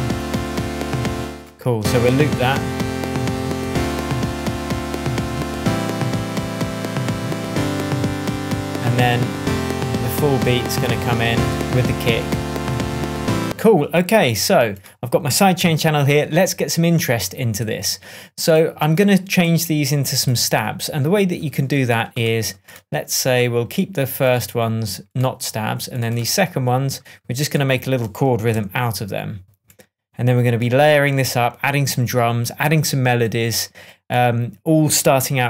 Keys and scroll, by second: 1.1 space, 7.8 super+d, 9.0 ctrl+Down, 11.5 ctrl+Right, 13.4 space, 15.5 super+d, 28.4 p.